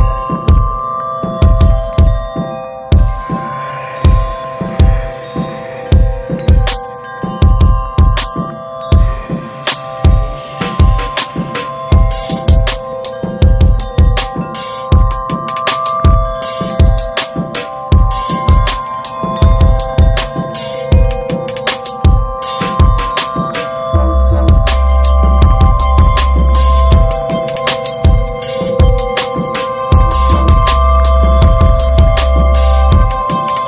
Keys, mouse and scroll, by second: 7.4 scroll down 3, 7.6-8.2 middle drag, 8.2 ctrl+s, 8.4 middle drag, 8.7 ctrl+s, 11.3-15.7 middle drag, 15.7 click, 16.8-17.8 drag, 17.8 ctrl+v, 19.3 click, 21.1-23.4 drag, 27.5 click, 28.7 scroll up 4, 29.1-29.8 middle drag, 29.8 scroll down 3, 30.0-32.9 middle drag, 32.9 click, 33.0-33.5 middle drag, 33.5-33.6 scroll up 2.